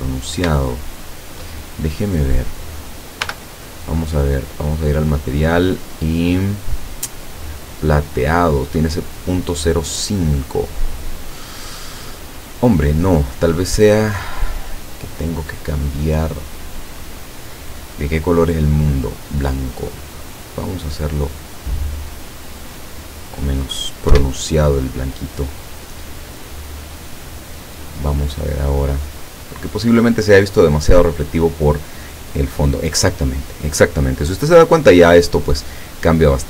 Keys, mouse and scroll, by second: 0.1-0.5 scroll up 2, 0.6 shift+middle click, 2.2 right click, 3.3 l, 4.8 click, 6.4-6.8 scroll up 1, 7.1 click, 13.0-13.8 scroll down 2, 14.1 middle click, 15.1 scroll down 1, 15.8-17.3 middle drag, 17.4 middle click, 18.4 click, 19.9 click, 21.5-22.9 drag, 24.2 F12.